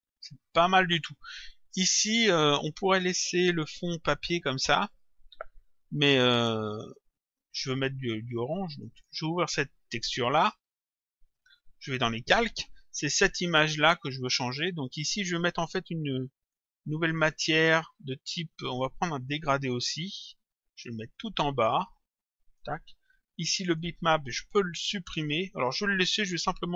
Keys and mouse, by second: 3.4 click, 8.8 click, 10.5 click, 12.3 click, 16.4 click, 19.4 click, 21.2 click, 23.7 click.